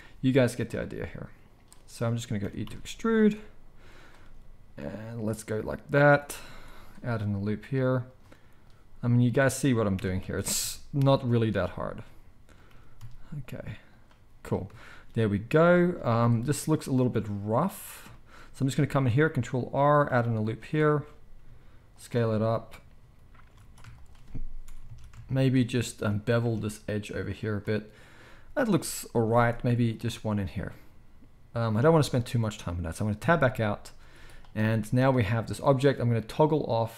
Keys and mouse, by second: 0.0-1.6 drag, 0.8 s, 1.6-8.7 middle drag, 2.4 e, 4.2 s, 6.4 ctrl+r, 7.0 s, 8.7-11.3 drag, 9.9 e, 11.3-23.9 middle drag, 11.5 s, 12.7 g, 16.0 z, 19.2 ctrl+r, 21.0 s, 23.6 alt+a, 23.9 shift+click, 24.0-36.9 shift+middle drag, 24.8 alt+a, 26.4 ctrl+b, 29.5 ctrl+r, 30.2 s, 33.2 Tab, 34.0 z.